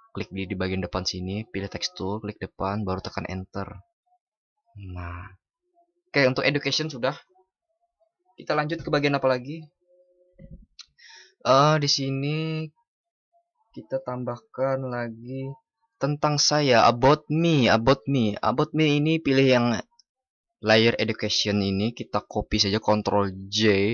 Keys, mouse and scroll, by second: 23.1 ctrl+shift+i.